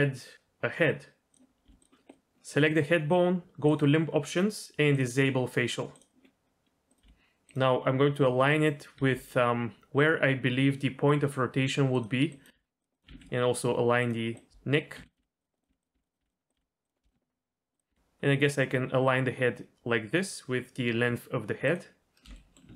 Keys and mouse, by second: 1.6 g, 3.7-6.0 drag, 7.0 g, 8.6 click, 8.9 g, 12.4 click, 12.5 g, 12.9 click, 13.1 g, 14.4 click, 14.9-16.6 typing, 16.5 click, 17.0 shift+middle click, 17.9 g, 22.3 shift+middle click.